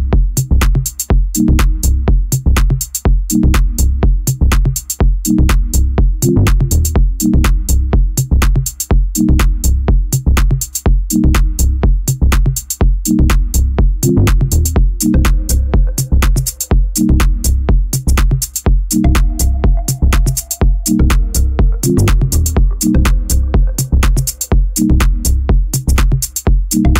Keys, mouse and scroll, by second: 0.8 alt+middle click, 1.5 alt+middle click, 1.8 z, 2.5 b, 3.5 Delete, 5.0 z, 5.3 middle click, 5.9 3, 6.1 click, 6.4 middle click, 6.7 Delete, 7.4 middle click, 8.2 2, 8.4 click, 8.7 alt+shift+click, 8.9 alt+shift+click, 9.2 e, 9.5 g, 10.6 f, 10.8-12.2 middle drag, 12.2 1, 12.7 click, 13.2 shift+click, 14.1 click, 14.6 shift+click, 15.5 scroll down 4, 15.7 Tab, 16.0-17.0 middle drag, 17.0 scroll down 2, 17.2-18.4 middle drag, 18.4-19.5 scroll up 5, 19.5 shift+middle drag, 19.8-20.2 scroll up 3, 20.2-23.5 middle drag, 23.5-24.0 scroll down 4, 24.0 shift+a.